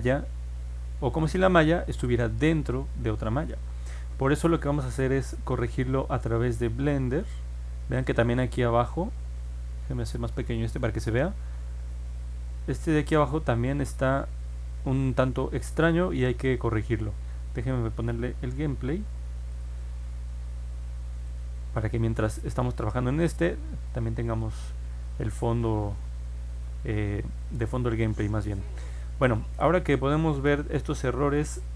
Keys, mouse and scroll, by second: 5.8-7.9 alt+drag, 10.8-11.9 drag, 19.5 click, 21.2 click, 23.1 middle click, 23.1 scroll down 1, 23.7 middle click, 24.4 alt+click, 25.9 alt+middle click, 26.8-27.3 scroll down 1, 27.8 alt+middle click, 30.6 alt+click.